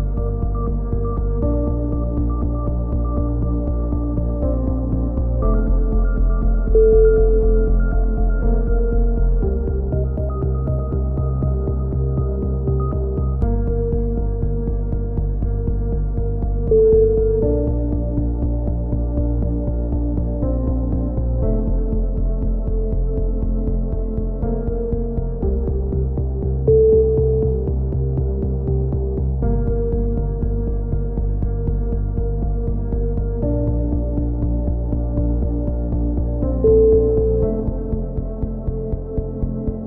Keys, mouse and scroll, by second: 3.9 a, 4.2 ctrl+z, 4.5 ctrl+z, 5.1 ctrl+r, 7.4 ctrl+z, 8.0 ctrl+r, 9.4 a, 10.5 ctrl+z, 10.9 ctrl+z, 11.3 ctrl+r, 12.5 a, 12.9-14.6 right drag, 14.7-18.8 right drag, 18.1 x, 20.4-22.7 right drag, 21.1 z, 22.1 x, 23.1 right click, 23.8-25.3 typing, 24.2 middle click, 25.5 middle click, 26.5 click, 28.7-29.3 ctrl+z, 29.5 ctrl+z, 29.7 ctrl+z, 29.9 ctrl+z, 30.7 a, 31.6 ctrl+r, 32.6 a, 33.2 ctrl+r, 34.7 a, 35.1 z, 35.5 click, 37.4 x, 37.8 click.